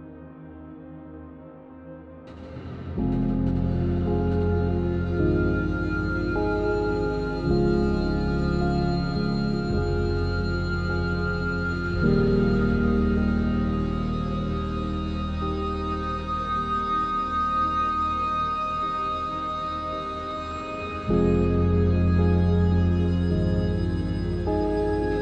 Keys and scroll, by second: 2.1 ctrl+s, 3.5 ctrl+z, 5.8 ctrl+z, 6.3 ctrl+z, 6.6 ctrl+z, 7.4 ctrl+z, 8.1 i, 9.3 e, 10.7 ctrl+z, 11.3 ctrl+z, 12.8 e, 15.9 Tab, 16.7 ctrl+z, 18.0 ctrl+s, 19.3 3, 20.0 alt+h, 20.5 1, 21.3 shift+a, 21.7 Tab, 22.1 shift+a, 23.4 7, 24.0 r, 24.6 z.